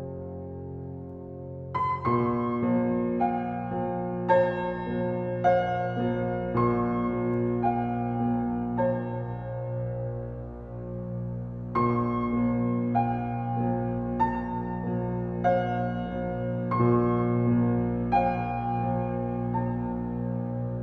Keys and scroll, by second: 8.6 Left, 10.6 Left, 11.9 Left, 14.9 Left, 17.3 Left.